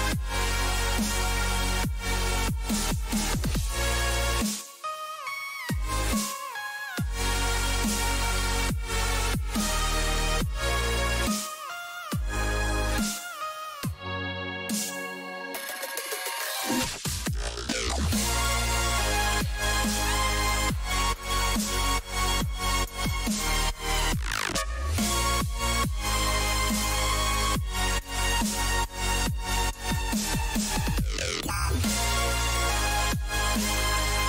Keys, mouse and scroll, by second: 18.9-22.3 middle drag, 26.3-27.4 middle drag, 27.3 a, 27.6 a, 28.8 b, 30.5-32.5 drag, 33.6 a.